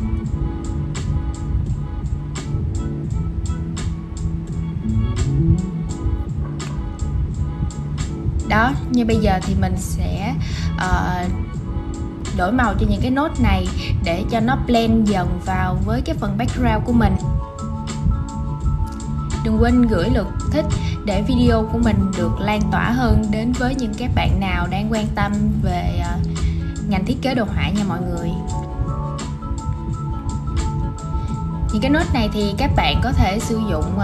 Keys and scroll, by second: 1.5 super+v.